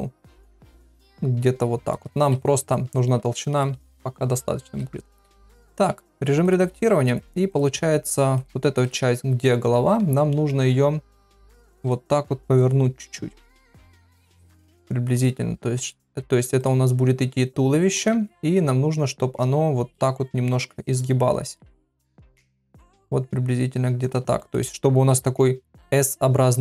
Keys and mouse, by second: 3.4 shift+middle click, 5.9 Tab, 6.4 click, 6.8 shift+middle click, 9.9 g, 12.6 click, 15.8 click, 16.2 g, 17.9 click, 18.1 g, 21.4 click, 21.6 g, 22.6 click, 22.8 g, 24.3 shift+middle click.